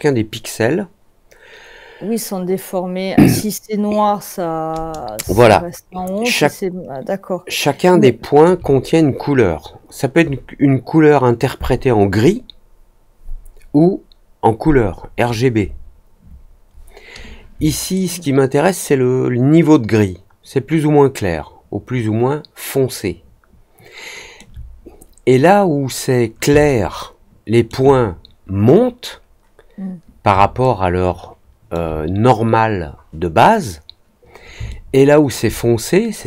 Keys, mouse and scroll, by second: 5.4-8.4 alt+middle drag, 17.9-24.3 alt+middle drag, 26.6-27.6 alt+middle drag, 30.6-31.7 alt+middle drag, 34.6 alt+middle click, 36.1-36.2 scroll up 2.